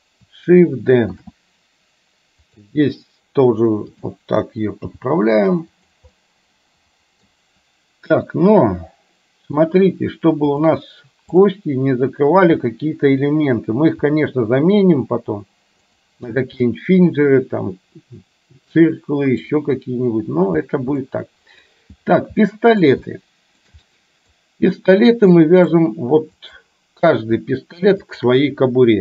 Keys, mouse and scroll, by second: 1.2 shift+d, 4.0 click, 4.8 g, 6.2-7.3 middle drag, 8.3-9.5 middle drag, 11.3 click, 14.0 g, 16.8-19.4 middle drag, 21.2 middle click, 22.5 scroll up 1, 22.7 middle click, 23.2 shift+middle click, 23.7 scroll down 1, 23.9 scroll up 1, 24.0 middle click, 24.3 scroll down 1, 25.4 middle click, 26.5 click, 28.2 shift+click.